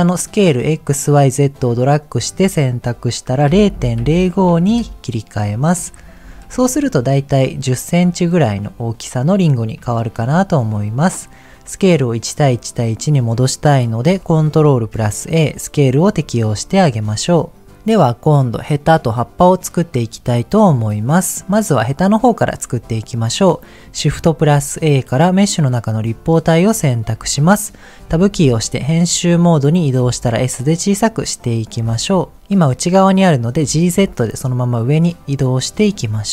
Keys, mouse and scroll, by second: 0.7-4.8 drag, 6.0-6.4 scroll up 5, 6.6 shift+middle click, 10.1 shift+middle click, 10.3-11.0 shift+scroll up 2, 14.5 ctrl+a, 16.8 shift+middle click, 17.0-17.7 scroll up 2, 20.6 click, 21.1 middle click, 24.1 shift+a, 26.6-27.7 scroll down 1, 28.1 Tab, 28.5-29.1 scroll down 4, 30.0 s, 31.5 click, 31.7-32.3 scroll up 5, 33.7 g, 33.9 z, 35.6 click, 36.0-36.3 scroll up 2.